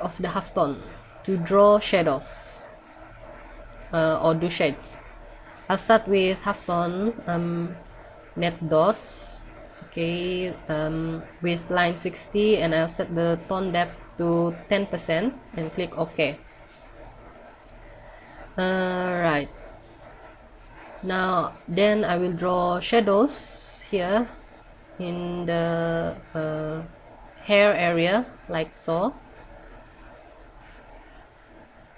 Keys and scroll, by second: 20.9 scroll down 1, 22.9 scroll down 1.